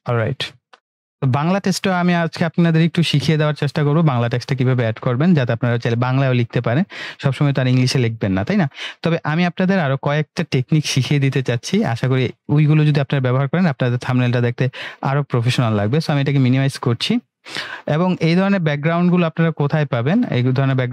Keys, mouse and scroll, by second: 16.1-16.7 drag.